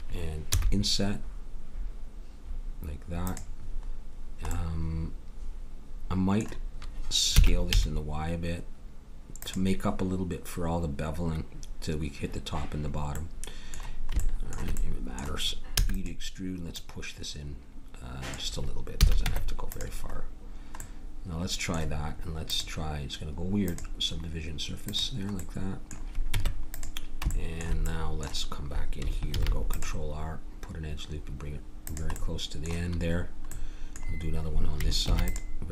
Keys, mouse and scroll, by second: 0.5 i, 7.3 s, 13.2 middle click, 13.4 middle click, 15.7 e, 16.7 click, 19.0 a, 19.2 Tab, 25.4 click, 26.3 Tab, 29.3 ctrl+r, 35.0 ctrl+r.